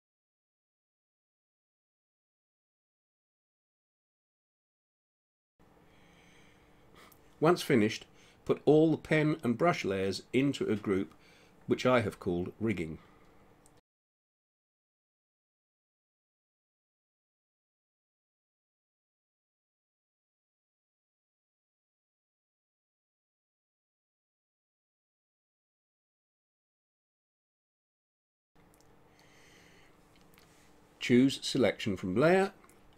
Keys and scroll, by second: 2.4 ctrl+z, 20.8-23.1 typing, 23.4 Return, 27.1 ctrl+0, 29.9 space.